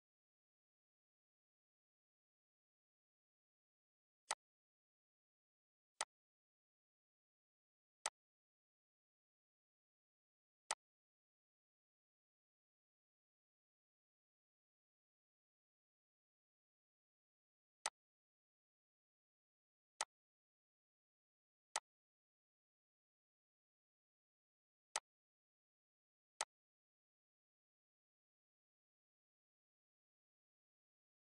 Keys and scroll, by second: 4.4 ctrl+d, 28.7 ctrl+d.